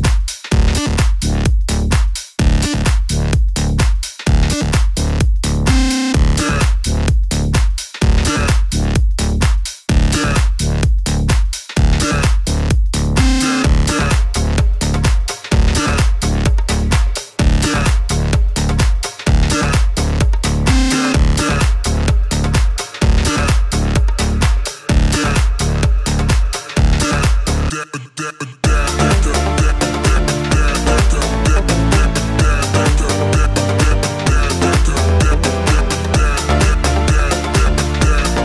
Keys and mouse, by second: 0.5-4.0 drag, 2.2 KP_1, 2.8 KP_3, 2.8 r, 4.0-7.1 middle drag, 4.4 shift+d, 7.1-14.3 drag, 12.3 KP_1, 12.4 KP_3, 14.0 shift+d, 14.3-28.7 middle drag, 14.7 r, 16.6 g, 19.2 s, 20.0 s, 21.4 g, 26.2 KP_1, 26.2 KP_3, 27.7 shift+d, 28.7-29.7 drag, 29.1 s, 29.7 middle click, 30.0-31.4 drag, 30.6 s, 31.4-34.2 middle drag, 31.7 KP_1, 31.8 KP_3, 32.6 g, 34.2-36.7 drag, 36.3 s, 36.7-38.4 middle drag, 37.0 s.